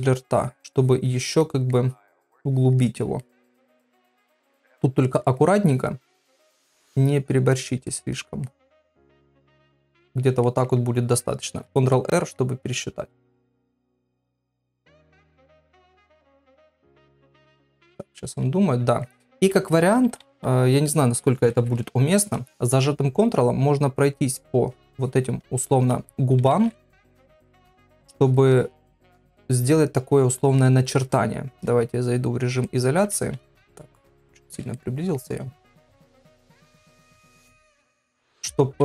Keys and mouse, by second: 0.0 click, 0.3 click, 0.8 click, 1.1 click, 1.4 middle click, 2.5 click, 2.8 click, 3.2 shift+middle click, 3.9 shift+middle click, 4.7 click, 5.1 click, 5.4 click, 5.7 click, 6.1 click, 6.4 click, 6.6 click, 7.0 middle click, 7.6 click, 7.9 click, 8.5 middle click, 9.2 click, 9.5 click, 9.9 click, 10.5 ctrl+middle click, 18.0-19.0 middle drag, 19.3 ctrl+middle click, 20.0 [, 20.2 [, 22.0 ctrl+s, 23.9 ctrl+click, 24.4 ctrl+click, 24.7 ctrl+click, 25.0 ctrl+click, 26.4 [, 26.5 [, 27.5 ctrl+click, 27.9 ctrl+click, 28.2 ctrl+click, 28.5 ctrl+click, 28.9 ctrl+click, 29.6 ctrl+click, 30.1 ctrl+click, 30.6 middle click, 31.9 KP_Divide, 32.7 ctrl+middle click, 33.5 ctrl+middle click, 34.8 shift+middle click, 35.4 shift+middle click, 36.5 ctrl+middle click, 38.1 [, 38.3 [, 38.7 ].